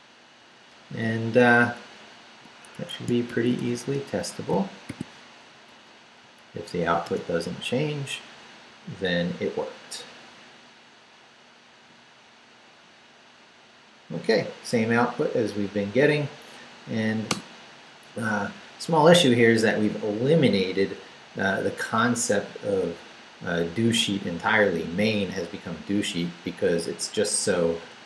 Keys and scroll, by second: 0.3 Up, 1.0 Up, 1.5 Up, 2.7 Escape, 3.2 shift+;, 3.6 shift+w, 3.9 Return, 4.5 shift+Return, 4.8 shift+;, 5.4 shift+Up, 7.0 Return, 17.3 Return, 26.9 Down, 27.5 Down, 27.8 Up.